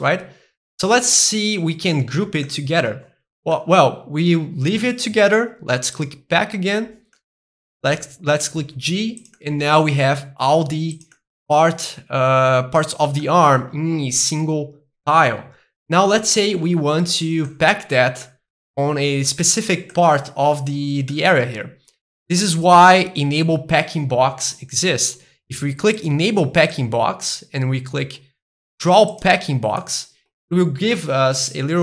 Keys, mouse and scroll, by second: 3.1-5.6 middle drag, 6.0-7.2 drag, 7.2-8.7 middle drag, 8.7 g, 9.2 click, 9.4 middle click, 9.7 g, 10.9 click, 11.1-13.2 middle drag, 13.3-15.3 middle drag, 17.5-19.5 middle drag, 19.9 middle click, 20.6-21.4 scroll up 2, 21.4-22.6 middle drag, 22.6-23.6 scroll up 2, 23.6-24.6 scroll up 1, 26.0 click, 26.7-28.8 middle drag, 29.2 click, 29.8-31.8 middle drag.